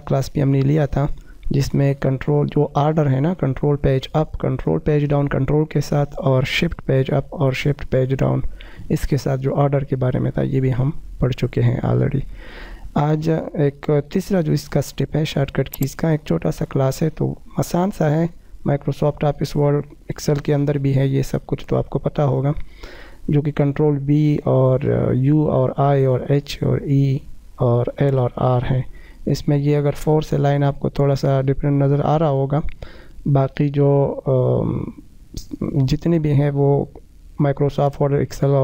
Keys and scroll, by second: 1.6 shift+F2, 10.4 F4, 21.2 shift+F2.